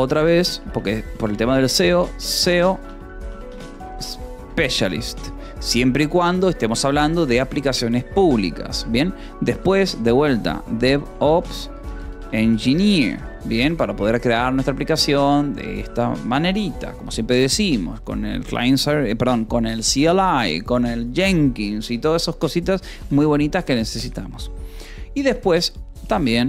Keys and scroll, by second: 0.0-5.3 typing, 6.5 ctrl+s, 6.8 o, 7.2 :, 7.3 space, 9.7 e, 11.4-12.9 typing, 13.6 ctrl+s, 22.1 o, 22.8 :, 22.9 space, 26.0-26.4 typing.